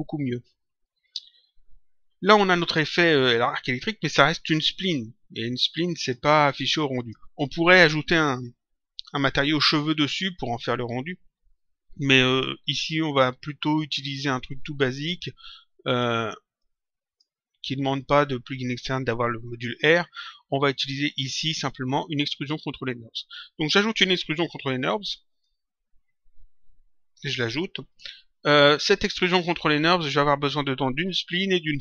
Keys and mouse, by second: 5.9 click, 16.5 click, 20.8 click.